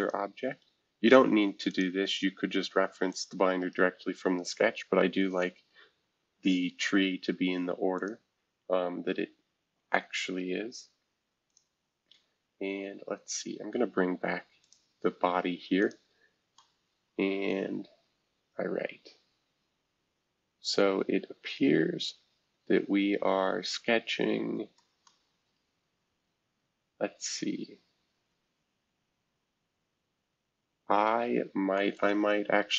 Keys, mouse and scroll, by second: 0.0-1.6 drag, 1.7-5.2 drag, 3.6-5.2 right drag, 7.9-9.5 drag, 10.4-11.5 scroll down 2, 11.5 click, 13.4-14.6 scroll up 2, 14.6 click, 15.8 click, 16.3-20.4 scroll up 2, 16.5-25.0 middle drag, 20.4-21.2 scroll up 1, 21.2-24.7 scroll up 1, 31.7-32.7 middle drag.